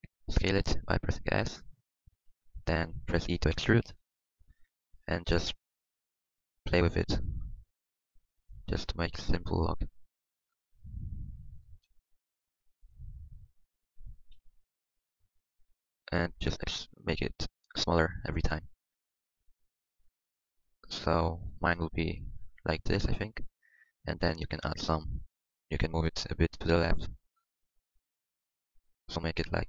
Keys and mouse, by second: 0.3 s, 3.7 e, 6.1 s, 8.6-10.3 middle drag, 10.3-12.9 drag, 12.9 middle click, 13.1 click, 14.3 KP_1, 15.2 e, 15.8 s, 17.6 s, 18.0 e, 18.5 s, 20.0 click, 21.1-23.0 middle drag, 23.7-26.9 middle drag.